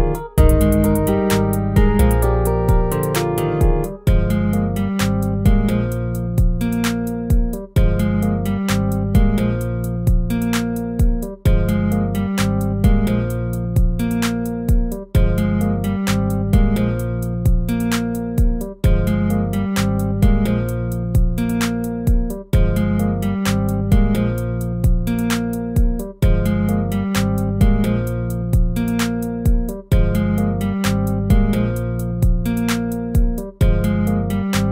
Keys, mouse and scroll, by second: 0.1 ctrl+z, 3.5 ctrl+-, 4.5 ctrl+z, 9.0 ctrl+-.